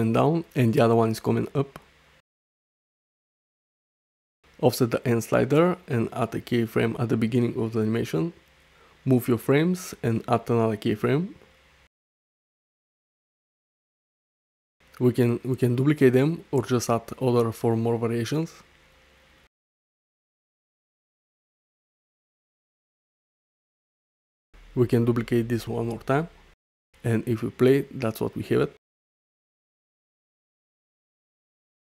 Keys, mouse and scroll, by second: 0.1 Left, 1.3 Right, 2.6 alt+Tab, 2.7 alt+s, 3.2 Tab, 5.1-6.7 drag, 8.0 i, 9.5-11.2 drag, 12.5 click, 13.8 i, 15.5-16.1 drag, 16.6-17.2 drag, 18.2-19.3 drag, 19.9 i, 20.9-22.2 drag, 23.0 click, 24.1 i, 24.7-25.1 drag, 25.3 shift+d, 26.7 click, 28.0 space, 31.3 space, 31.4 click.